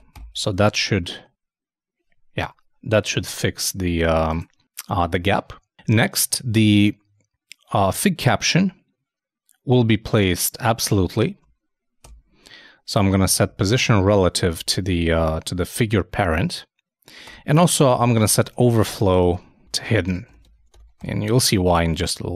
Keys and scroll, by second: 0.4 super+;, 0.5 super+s, 0.7 super+Tab, 3.2 shift+super+f, 10.7 super+Tab, 19.5-20.3 typing.